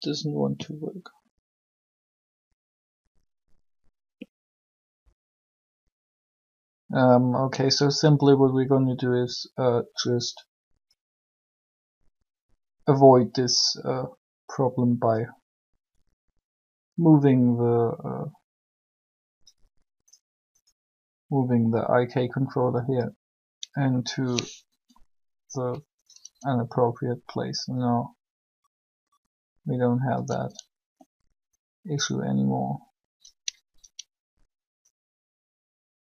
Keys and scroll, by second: 24.6 r.